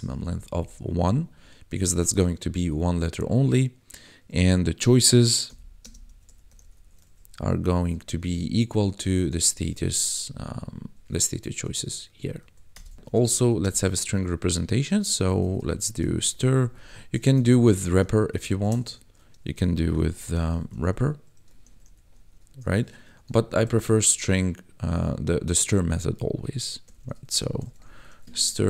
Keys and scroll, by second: 0.0 Down, 0.7 Tab, 1.3 1, 5.4-7.8 typing, 9.0 s, 9.2 t, 9.5 a, 10.3 Down, 11.0 Tab, 11.6 ctrl+s, 12.0 Escape, 12.4 Right, 12.7 Return, 13.0 d, 13.1 e, 13.5 space, 15.2-16.3 typing, 17.5 ctrl+shift+Left, 19.9-22.1 typing, 23.0 Right, 23.3 ctrl+shift+Left, 26.8-28.4 typing.